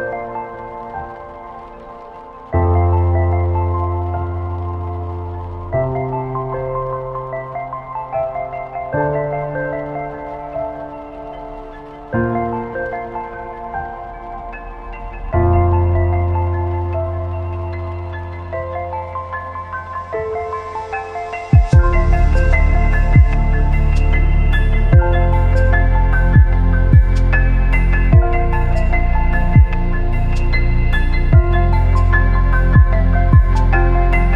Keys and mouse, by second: 1.0 click, 2.2-3.0 shift+drag, 9.5 click, 10.7-11.9 drag, 14.3 shift+a, 18.1-19.5 typing, 22.2 click, 26.8-28.6 drag, 31.8 click, 33.1 r.